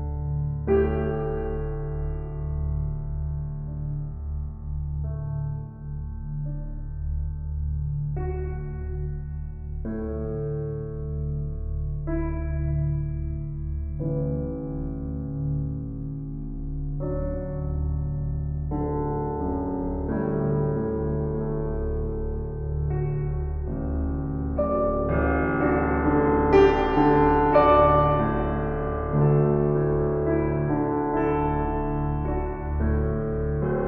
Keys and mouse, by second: 2.4 s, 3.8 click, 4.4 g, 4.7 x, 7.9 click, 8.6 s, 11.0 click, 11.7 g, 12.1 x, 13.5 click, 14.0 ctrl+z, 14.3 ctrl+z, 14.9 ctrl+z, 17.0-18.2 ctrl+alt+drag, 19.7-21.7 drag, 22.1-24.5 drag, 25.0-27.2 drag, 27.4 drag, 28.4 click, 28.8-33.8 alt+drag, 32.2 7.